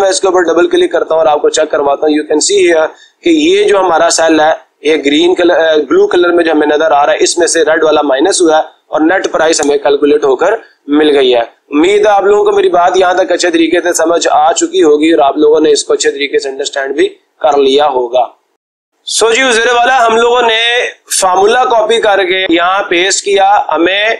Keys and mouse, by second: 0.6 click, 1.2 click, 15.2-16.2 drag, 17.0 right click, 18.1 click, 22.2-23.2 drag.